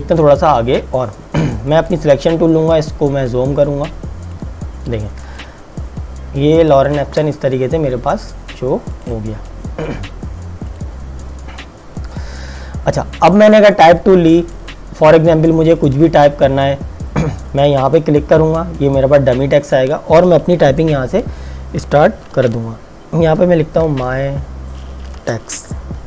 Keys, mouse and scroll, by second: 1.8 click, 2.8 z, 3.6 click, 5.3 space, 5.5 click, 5.9 space, 6.9 space, 9.0 click, 14.7 click, 17.9 click, 23.9 typing, 25.2-26.0 typing.